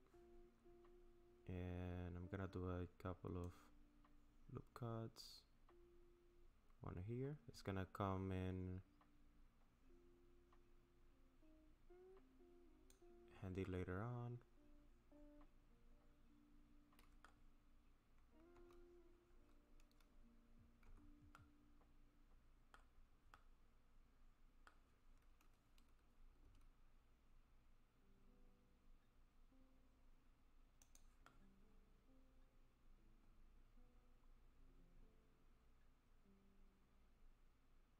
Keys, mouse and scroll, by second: 3.5 click, 13.7 middle click.